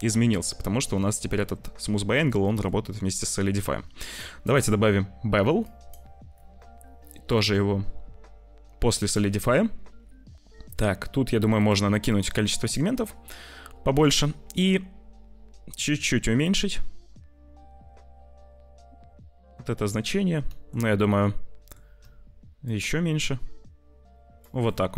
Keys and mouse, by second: 2.4 click, 4.0 click, 4.3-5.9 drag, 7.2-9.1 drag, 11.6 click, 11.9 click, 14.1-15.7 shift+drag, 15.7-19.7 shift+middle drag, 20.9 click, 22.7-24.4 shift+drag, 24.8 click.